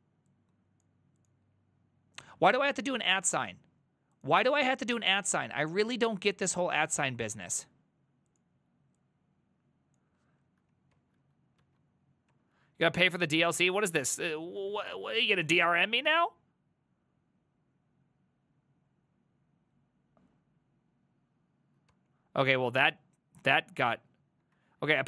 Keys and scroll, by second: 11.0 ctrl+c, 11.7 alt+{, 12.3 Up, 12.6 ctrl+Left, 12.8 ctrl+Left, 13.0 ctrl+Left, 13.1 ctrl+Left, 13.4 ctrl+Left, 13.6 ctrl+Right, 14.3 ctrl+Right, 14.3 ctrl+Right, 14.7 space, 15.0 ctrl+v, 15.6 ctrl+Right, 16.1 Return, 21.9 ctrl+c, 22.5 Up, 22.9 ctrl+Left, 23.5 ctrl+Left, 23.6 ctrl+Left, 24.4 ctrl+Left, 24.6 ctrl+Right, 24.7 ctrl+Right.